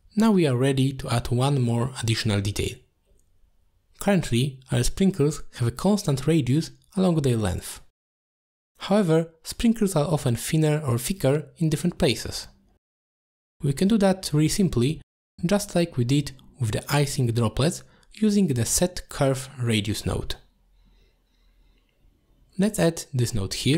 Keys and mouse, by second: 0.3 shift+middle drag, 0.6-0.9 middle drag, 1.4 shift+middle drag, 2.0 middle click, 3.3 click, 9.6 middle click, 14.1 middle click, 16.1-17.7 middle drag, 18.4 middle click, 19.6-20.1 drag, 20.4 g, 21.6 click, 21.9 g, 22.9 click, 23.1 shift+a.